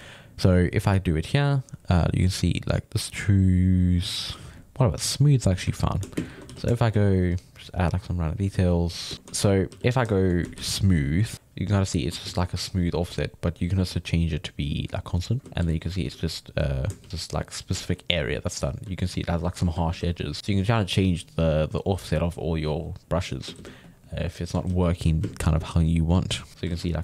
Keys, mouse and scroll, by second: 0.0-1.1 middle drag, 1.1-3.9 drag, 4.3-5.7 drag, 5.7 ctrl+middle click, 6.2 shift+space, 6.5 f, 6.7 shift+middle click, 7.2-9.0 drag, 9.0 shift+middle click, 9.7 f, 10.5 shift+s, 11.2 f, 11.3 click, 12.3 ctrl+z, 13.5-15.4 drag, 15.4 ctrl+z, 15.6 g, 15.8 click, 16.0 f, 17.0 shift+s, 17.1 click, 17.8-19.9 ctrl+middle drag, 19.9 ctrl+z, 20.4-23.6 drag, 23.6 ctrl+z, 23.8 click, 24.4 middle click, 24.7 ctrl+z, 25.2 shift+space, 25.7 f, 26.5 click, 26.7 ctrl+z, 26.9-27.0 middle drag.